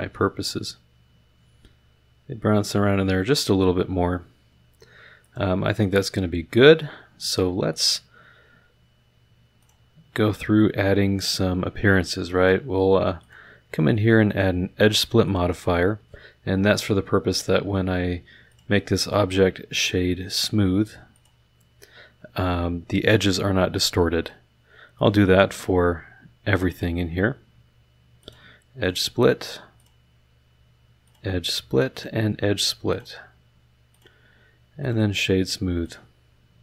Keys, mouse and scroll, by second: 5.2 click, 9.6 click, 11.2 click, 13.2 click, 14.3 click, 15.2 click, 18.5 click, 21.1 click, 24.9 click, 26.7 click, 28.2 click, 28.8 click, 29.8 click, 31.0 click, 31.9 click, 32.9 click, 33.9 click, 34.8 click, 35.8 click.